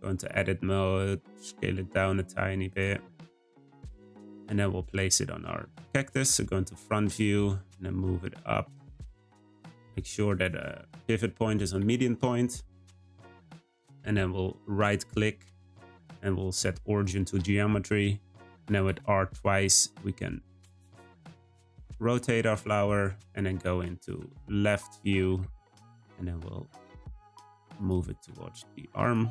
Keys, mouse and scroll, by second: 1.3 s, 2.8 Tab, 3.0-4.9 middle drag, 6.9 g, 9.9 ., 13.5 r, 14.7-17.8 right drag, 18.6 r, 25.0 shift+middle click, 25.6 g, 28.2 s.